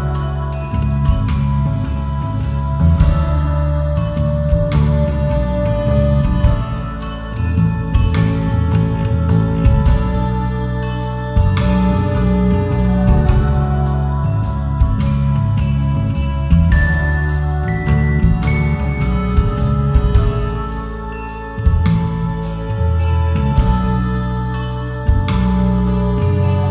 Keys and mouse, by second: 0.1 click, 1.4 e, 1.7 y, 4.2 click, 6.1 click, 7.3-9.0 drag, 11.1 click, 11.5 e, 12.1 y, 13.7 click, 15.1-17.0 drag, 19.3 KP_7, 20.1 Tab, 21.1 ctrl+j, 21.7 Tab, 23.9 KP_7, 24.6 e.